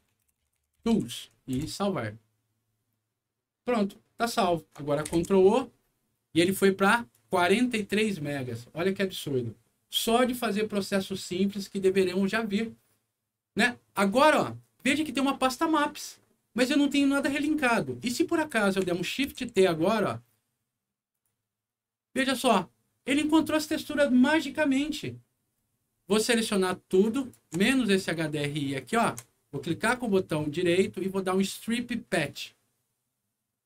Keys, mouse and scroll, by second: 0.0-1.5 typing, 1.5 Return, 4.2 click, 5.0 ctrl+o, 7.1 click, 17.2 click, 18.4 click, 19.2 shift+t, 21.1 shift+click, 27.1 shift+click, 28.8 ctrl+click, 29.8 ctrl+right click, 32.1 ctrl+click.